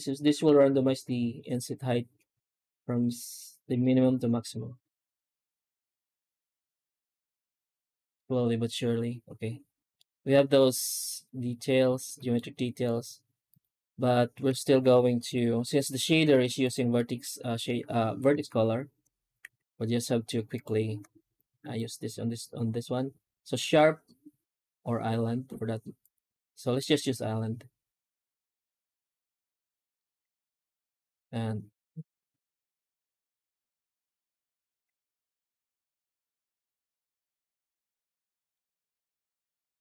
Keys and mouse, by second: 9.8-12.2 middle drag, 13.3 right click, 15.1 g, 16.9 middle drag, 18.2 alt+shift+z, 19.3 shift+q, 29.4 middle click, 30.1 z, 34.6 ctrl+space, 35.2 middle drag, 36.1 alt+shift+z, 36.5-36.8 middle drag, 37.1 alt+shift+z, 38.2 middle drag.